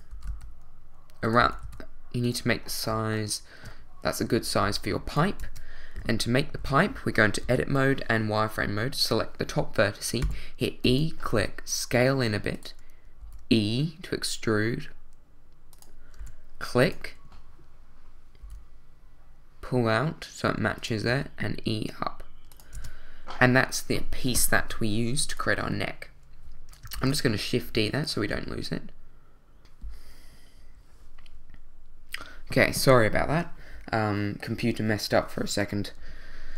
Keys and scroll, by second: 0.3 x, 1.4 s, 1.6 z, 4.6 shift+s, 5.4 Tab, 6.0 z, 6.6 a, 7.4 b, 10.2 e, 11.3 s, 13.2 e, 16.2 e, 18.4 s, 21.1 e, 22.7 Tab, 24.6 z, 26.9 shift+d, 29.6 super+z.